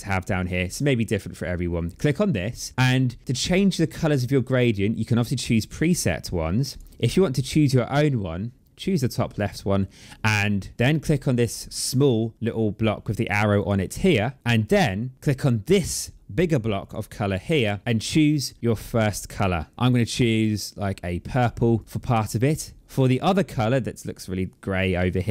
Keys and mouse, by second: 1.6 click, 5.4 click, 8.6 click, 13.4 click, 16.6 click, 19.2 click, 21.6 click.